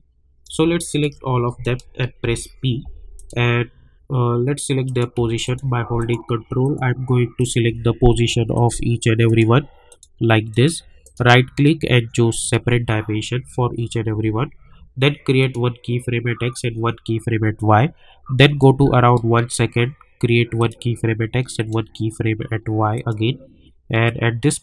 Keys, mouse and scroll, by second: 0.4 shift+Num_Lock, 0.4 click, 0.9 shift+click, 2.2 p, 3.1 click, 4.1 scroll down 1, 4.8 click, 5.4 ctrl+click, 7.8 ctrl+scroll up 2, 8.5 ctrl+click, 11.0 right click, 12.4 click, 15.4 click, 18.6-24.6 drag.